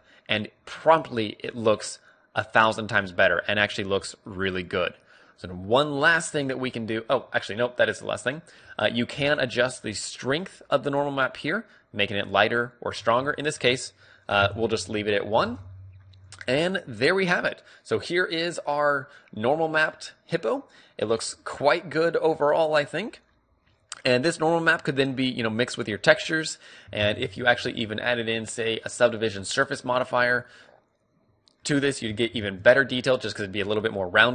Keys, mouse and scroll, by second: 0.3-1.9 drag, 1.9-3.3 middle drag, 4.4-9.2 middle drag, 9.2 a, 10.6-12.0 drag, 15.3 click, 16.3 shift+space, 16.6 KP_1, 17.0-18.0 middle drag, 22.2-25.8 middle drag, 26.4 middle click, 27.3-30.2 middle drag, 27.7 shift+space, 30.2-31.7 drag, 32.4 middle click, 33.2 shift+space, 33.9 middle click.